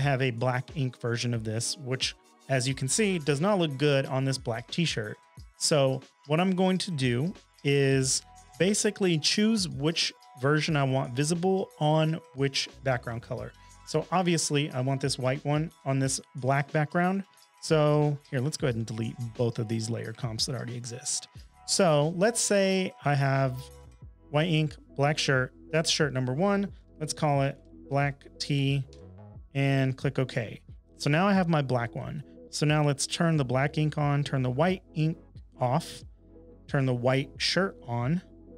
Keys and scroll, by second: 26.5-28.5 typing, 28.9 Return.